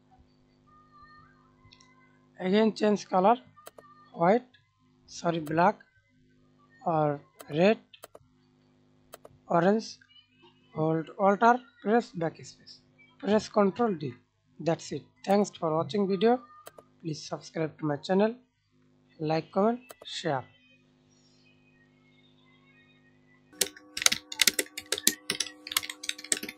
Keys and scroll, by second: 11.1 alt+BackSpace, 13.1 ctrl+d, 14.4 alt+space, 17.0 ctrl+alt+z, 18.8 alt+space, 19.6 alt+space, 22.1 ctrl+z.